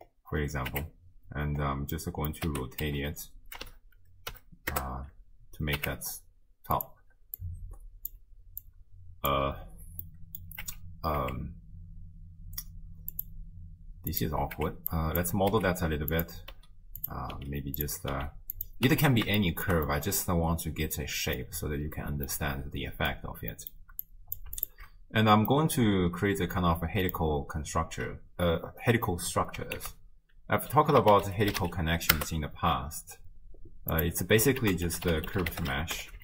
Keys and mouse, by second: 0.7 Tab, 2.1 middle click, 2.5 r, 5.8 Tab, 7.5 click, 8.6 click, 10.0-10.6 middle drag, 10.7 Tab, 11.2 Tab, 13.1 click, 14.6 Tab, 15.0 click, 15.5 e, 16.5 e, 17.4 e, 18.2 e, 18.9 Tab, 19.4 shift+drag, 19.9-21.4 middle drag, 22.4-23.2 middle drag, 23.5 middle click, 24.1 click, 24.6 alt+shift+click, 25.6-27.1 drag, 29.8 ctrl+a, 34.6 ctrl+a.